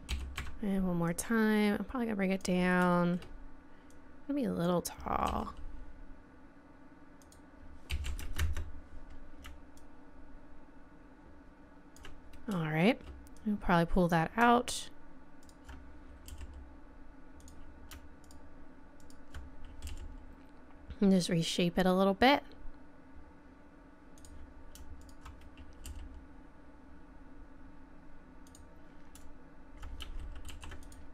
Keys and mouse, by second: 0.1 e, 2.6 click, 3.9 click, 4.2-5.3 middle drag, 5.3 click, 5.3 r, 7.9 s, 9.8-11.3 drag, 13.4-17.4 drag, 16.3 g, 19.9 g, 25.0 right click, 25.8 g, 30.5 ctrl+r.